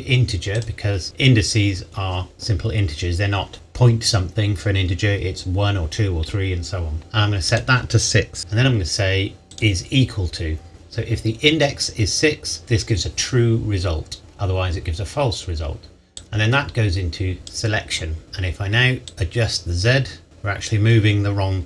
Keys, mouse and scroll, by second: 7.5 click, 9.5 click, 16.2 click, 19.0 click.